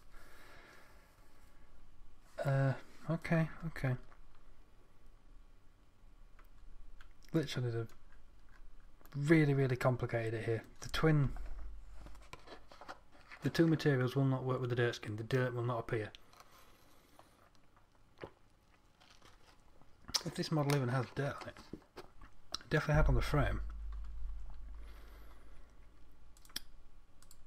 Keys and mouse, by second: 7.0 middle click.